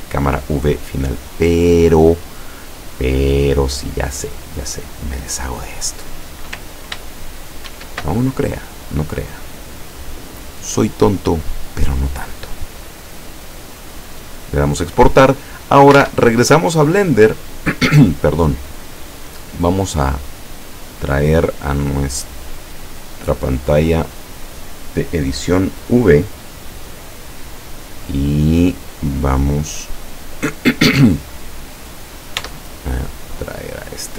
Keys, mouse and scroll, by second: 1.4 click, 2.9-3.2 scroll down 2, 4.3 click, 7.7 ctrl+shift+e, 9.6 click, 10.8 click, 12.4 click, 14.0 click, 16.1 alt+Tab, 19.7-21.6 drag, 22.2 click, 24.1 click, 28.1-28.7 scroll down 4, 28.9 scroll up 2, 29.6 scroll down 2, 31.3 click, 32.5 Tab, 33.5-33.9 scroll up 2.